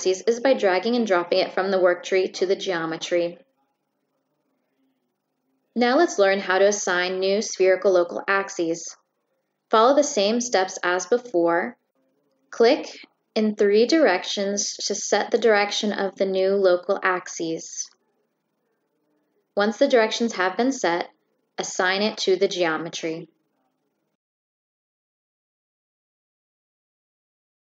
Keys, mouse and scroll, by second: 0.0-1.0 drag, 8.5 click, 13.2 click, 14.4 click, 15.3 click, 23.7 Escape, 24.4-24.8 right drag, 24.8 click, 25.3 click.